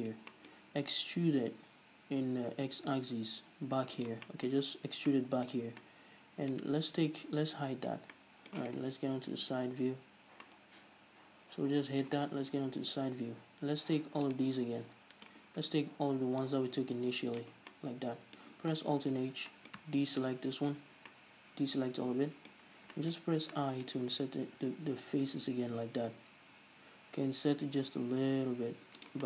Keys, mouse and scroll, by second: 0.4-4.2 middle drag, 1.6 e, 4.2 shift+click, 4.4-14.4 middle drag, 6.8-7.6 scroll up 2, 7.6-8.1 scroll down 2, 8.1 h, 9.3 KP_3, 12.6 KP_3, 14.4 click, 16.5 click, 17.8-20.6 middle drag, 19.2 alt+h, 20.6 alt+shift+right click, 21.2-29.2 middle drag, 23.3-23.6 scroll up 2, 24.7 i, 29.2 shift+click.